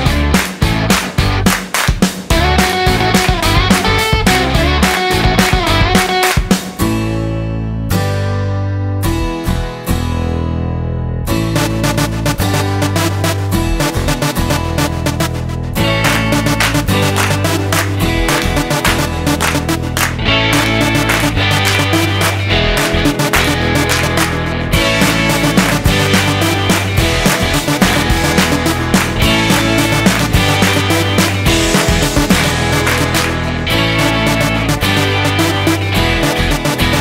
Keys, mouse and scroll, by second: 0.4 click, 17.8 click, 34.6 click, 35.6-36.8 scroll down 7.